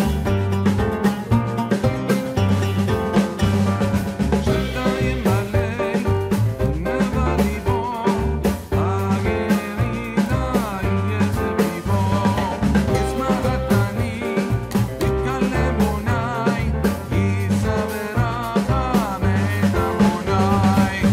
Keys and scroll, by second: 5.8 Return, 19.6 ctrl+space.